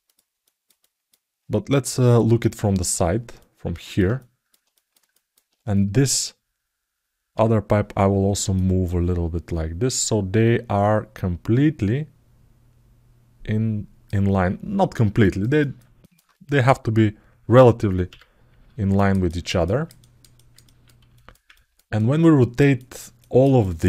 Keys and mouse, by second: 0.2 alt+middle click, 3.1 ctrl+alt+middle click, 3.9 alt+shift+middle click, 4.5 ctrl+alt+middle click, 4.9 alt+shift+middle click, 8.4-13.8 drag, 15.0 alt+middle click, 15.4 ctrl+alt+middle click, 15.8 ctrl+alt+middle click, 18.7 ctrl+alt+middle click, 19.4 ctrl+alt+middle click, 20.1 alt+middle click, 20.4 ctrl+alt+middle click, 20.9 alt+shift+middle click, 21.3 ctrl+alt+middle click, 21.7 alt+middle click, 22.5 alt+shift+middle click, 22.9 alt+middle click, 23.3 alt+shift+middle click.